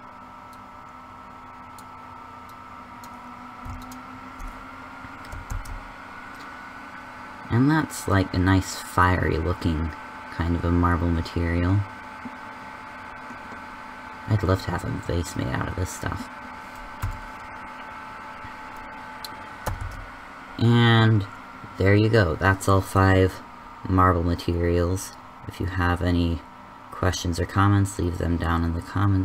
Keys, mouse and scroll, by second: 5.6 shift+z, 19.8 KP_0, 20.1 shift+z.